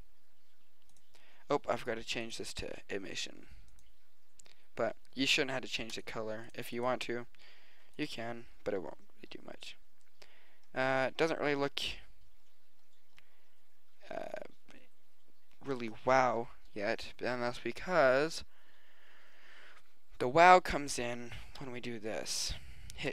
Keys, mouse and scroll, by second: 0.5 middle click, 2.2-4.2 drag, 6.0-6.5 drag, 9.0 click, 16.7 middle click, 17.9-19.7 middle drag, 20.8-22.0 middle drag.